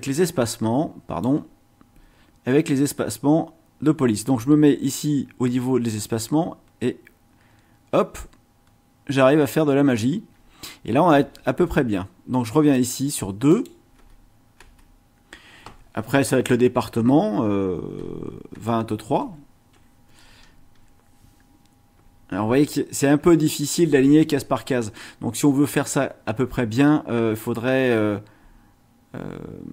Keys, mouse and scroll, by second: 6.1-6.5 scroll down 1, 6.8-7.5 scroll down 1, 7.5 scroll down 1, 8.6 scroll up 2, 11.1 space, 12.7 click, 13.5 click, 13.9 space, 17.9 KP_2, 18.5 space, 19.2 KP_3, 20.0 Left, 21.9 BackSpace, 28.6 scroll up 2.